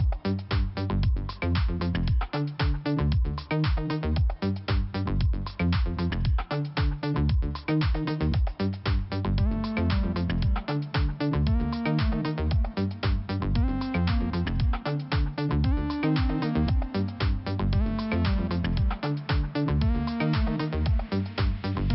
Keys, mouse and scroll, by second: 0.9-1.2 scroll down 1, 4.5 click, 5.6 click, 9.1 click, 10.5 click, 10.8 click, 11.4 scroll down 2, 13.5 click, 15.7 click, 17.3 click, 18.8 click, 21.1 click.